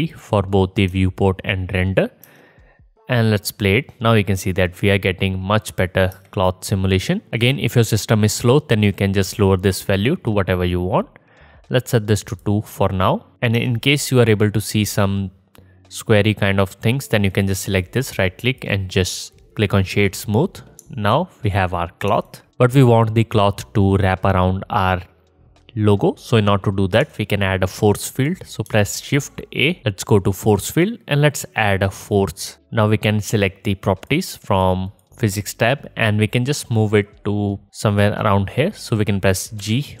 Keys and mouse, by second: 0.1-3.1 drag, 2.3 space, 3.7 click, 4.5-13.3 drag, 6.1 space, 7.1-14.2 alt+middle drag, 7.1-13.3 alt+right drag, 13.3 space, 13.6 space, 17.4-22.1 drag, 28.1 middle click, 29.2 shift+a, 31.8-34.0 drag, 34.0 middle click, 34.1-34.9 drag, 34.9 middle click, 35.2-40.0 drag, 39.6 g.